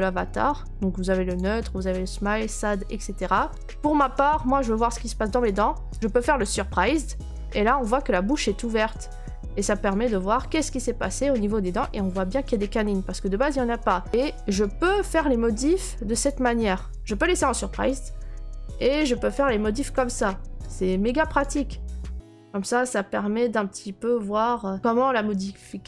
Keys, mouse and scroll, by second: 0.4-2.1 middle drag, 2.1 click, 3.3 middle click, 3.5 right click, 5.5 click, 6.0 right click, 7.6 right click, 8.0 scroll, 8.9 right click, 10.1 right click, 14.1 click, 16.2 click, 16.9 scroll, 19.3 click, 19.3-19.7 scroll, 21.4 click, 21.6 scroll, 24.8 click.